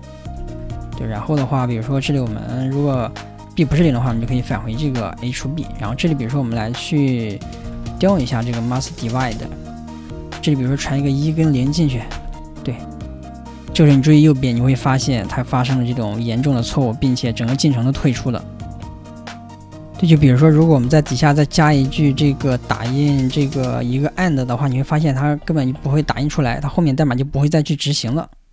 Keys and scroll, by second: 4.6 ,, 7.6 ,, 10.7 ,, 12.1 ,, 26.4 ,.